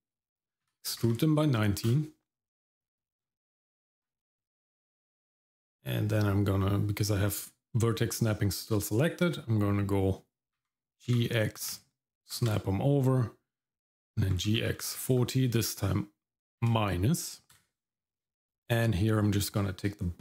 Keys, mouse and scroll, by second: 0.6 e, 2.8 click, 3.2-3.5 scroll down 2, 3.5 middle click, 4.3-5.8 scroll up 1, 8.7-10.6 scroll up 1, 10.6 g, 14.3 g, 18.5 click, 19.0 middle click.